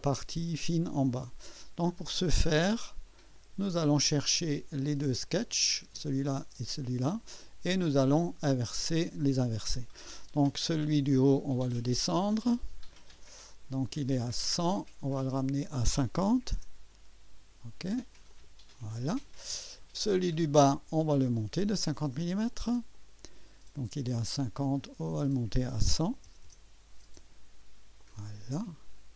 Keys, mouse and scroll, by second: 3.3 click, 4.8 click, 5.6 click, 5.9 space, 6.3 click, 6.6 space, 7.5 right click, 12.6 click, 13.1 click, 15.1 click, 16.2 5, 16.7 0, 18.3 click, 20.3 click, 22.5 click, 22.7-23.4 typing, 22.9 click, 24.8 click, 25.9 1, 26.3 0, 28.0 click, 28.2 typing.